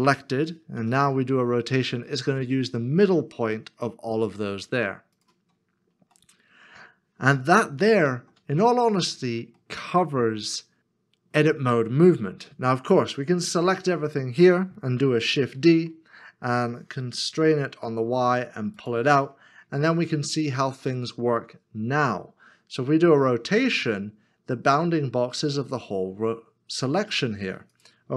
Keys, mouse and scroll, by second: 0.8 r, 6.2 middle click, 8.7 ctrl+z, 8.7 middle click, 9.6 shift+middle click, 15.5 shift+d, 17.6 y, 19.6 a, 23.2 r.